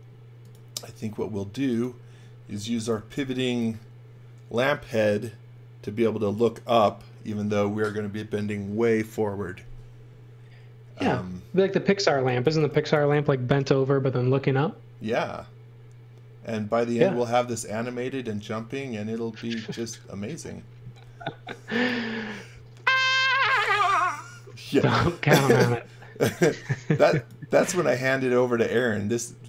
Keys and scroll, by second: 2.6 x, 2.9 v, 12.1 x, 12.4 v, 18.6 space, 21.0 m, 23.4 x, 23.7 v, 24.6 space, 26.2 r.